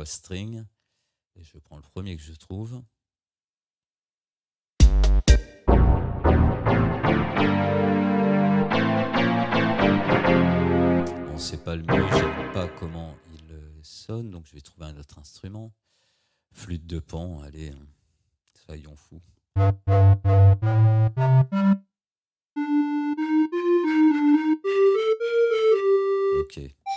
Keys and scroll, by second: 4.8 space.